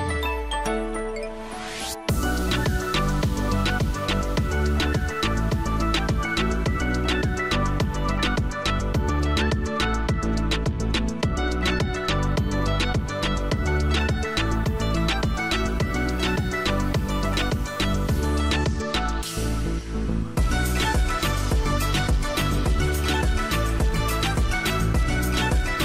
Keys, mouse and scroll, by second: 5.4 double click, 8.5 middle click, 9.6 scroll down 1, 9.8 middle click, 10.6-11.7 scroll up 1, 11.7 middle click, 12.5 right click.